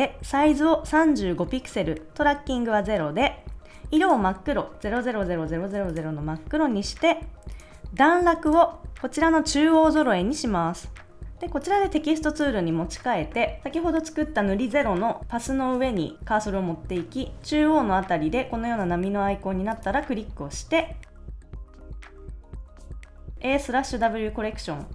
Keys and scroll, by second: 21.1-23.6 typing.